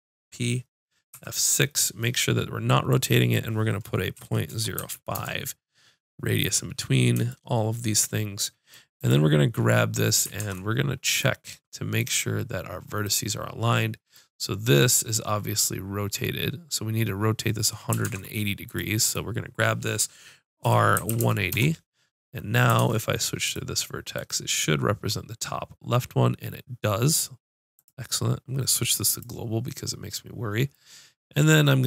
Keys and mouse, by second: 1.1 F6, 9.0-11.0 drag, 10.4 ctrl+Tab, 12.0-13.1 drag, 13.2 click, 13.6-18.0 drag, 18.0 ctrl+Tab, 19.0 click, 20.6 r, 22.8 ctrl+Tab, 24.1 click, 27.7-30.3 drag.